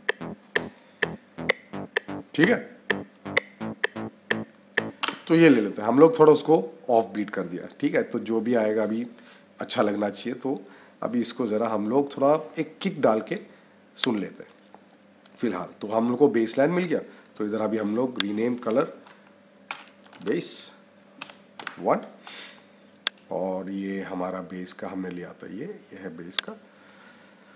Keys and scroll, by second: 4.9 -, 5.6 space, 19.5 b.